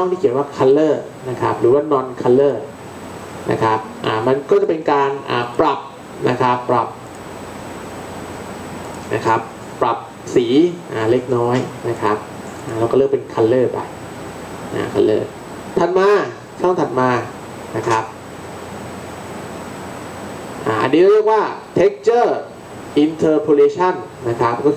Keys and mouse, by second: 0.6-2.6 drag, 4.7-6.2 middle drag.